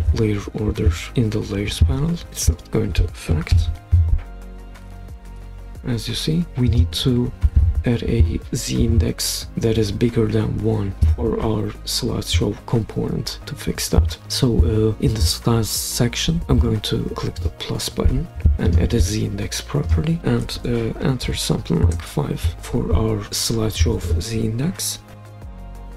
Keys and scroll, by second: 3.5 super+p, 5.5 Escape, 21.2 5, 21.9 Return, 25.2 super+p.